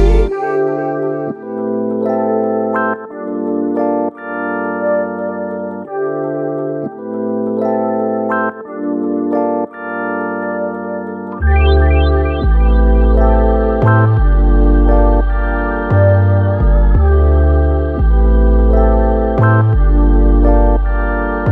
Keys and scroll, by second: 1.3 space, 16.1 x.